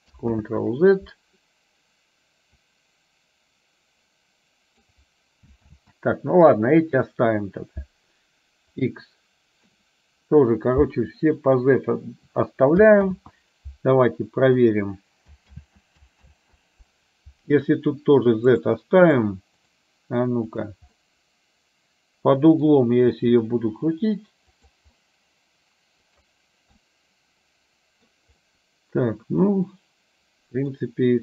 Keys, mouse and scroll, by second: 0.5 ctrl+z, 2.8-5.0 drag, 5.7 ctrl+z, 8.8 click, 11.4-14.8 drag, 15.6 ctrl+z, 16.4 ctrl+z, 20.6 click, 21.0-22.8 middle drag, 23.1 r, 25.1-26.4 middle drag, 26.8 middle click, 27.6 middle click, 28.6-30.9 middle drag.